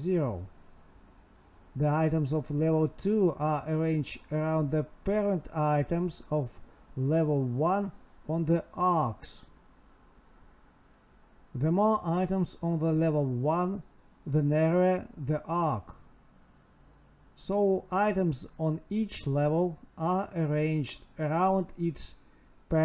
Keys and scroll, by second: 0.1 Tab, 1.6 space, 2.6 Down, 2.7 Tab, 3.1 space, 4.0 Tab, 4.4 space, 4.9 space, 5.1 space, 6.0 Tab, 6.7 Tab, 6.9 Escape, 7.0 Right, 10.1 ctrl+v, 14.5 Right, 17.1 Escape, 20.8 Escape, 21.4 End, 22.1 Left, 22.3 space, 22.5 space.